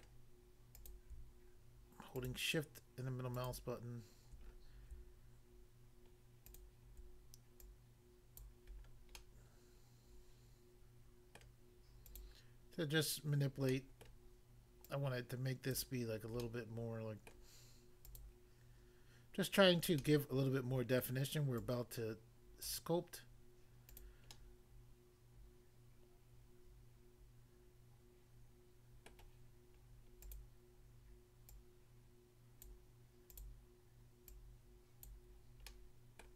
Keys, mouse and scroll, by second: 0.0 middle click, 0.7 click, 2.2 shift+click, 3.4 shift+click, 4.5 scroll up 1, 6.5 shift+click, 7.6 shift+click, 8.3 click, 8.7 scroll down 1, 9.1 middle click, 11.4 middle click, 12.0 click, 12.1 click, 13.7 middle click, 14.1 middle click, 14.9 click, 15.7 click, 16.4 middle click, 17.3 middle click, 18.1 click, 18.2 click, 20.0 middle click, 21.1 middle click, 21.7 click, 22.6 click, 23.9 click, 24.0 click, 24.3 middle click, 29.1 middle click, 30.3 click, 30.4 click, 31.5 click, 32.7 click, 33.3 click, 33.4 click, 34.3 click, 35.1 click, 35.6 middle click, 36.2 middle click.